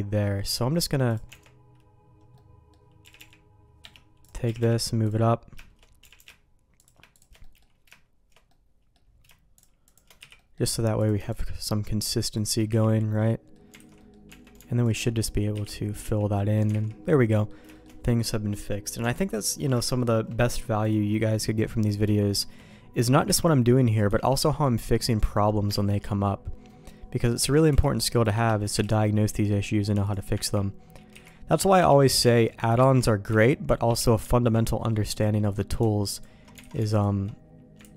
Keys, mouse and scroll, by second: 0.1 middle click, 0.5 right click, 1.3 Tab, 2.3 middle click, 3.0 g, 4.2 click, 4.3 g, 4.4 g, 6.0 g, 7.1 shift+click, 7.4 middle click, 8.5 middle click, 9.5 shift+click, 10.2 f, 10.3 middle click, 11.0 click, 11.3-12.5 shift+drag, 12.7 f, 12.9 middle click, 13.7 alt+a, 14.0 middle click, 14.3 Tab, 14.8 alt+click, 15.2 middle click, 15.5 f, 16.0 Tab, 16.3 middle click, 16.7 alt+a, 17.3 middle click, 17.7 shift+middle click, 19.0 Tab, 19.3 middle click, 19.8 shift+middle click, 21.6 middle click, 22.1 shift+middle click, 23.2 c, 24.3 middle click, 24.9 middle click, 25.7 ctrl+q, 26.7 middle click, 27.4 alt+a, 27.7 c, 28.8 ctrl+q, 30.0 click, 30.4 ctrl+x, 31.1 c, 32.2 ctrl+q, 32.9 ctrl+x, 33.3 c, 34.8 middle click, 35.1 click, 36.1 alt+click, 36.6 alt+a, 36.9 alt+click, 37.8 ctrl+x.